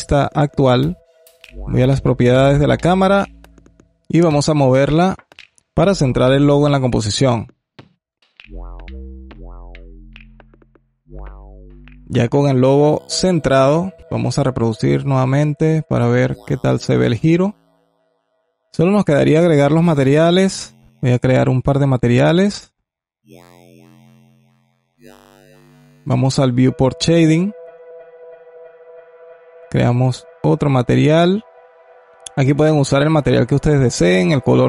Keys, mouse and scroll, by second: 2.6-5.1 drag, 6.5-11.0 drag, 12.7-14.0 scroll up 1, 14.0 click, 17.0-19.7 drag, 20.8-21.9 drag, 26.3 click, 28.0 click, 29.1-30.3 drag, 32.4 click, 33.1-34.6 alt+drag.